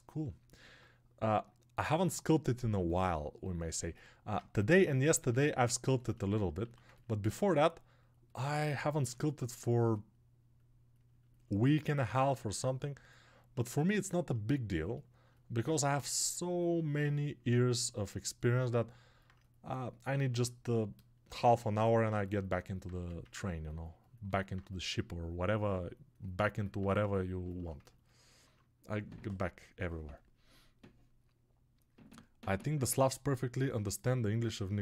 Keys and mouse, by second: 0.4-3.7 ctrl+middle drag, 3.7-6.8 alt+drag, 4.7 ctrl+Tab, 13.6-34.8 alt+shift+drag.